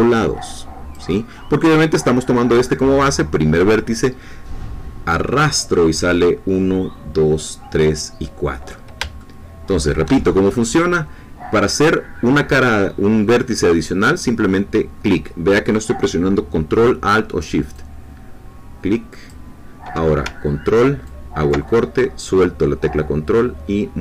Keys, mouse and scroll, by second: 9.2-10.2 shift+middle drag, 17.7-19.4 drag, 21.0-24.0 ctrl+drag.